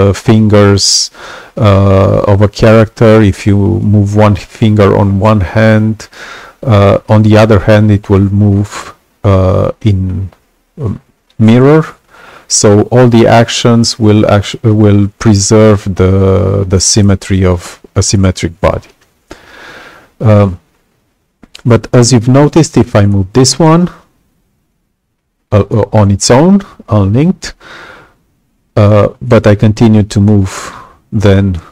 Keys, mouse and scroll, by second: 22.8-24.6 drag.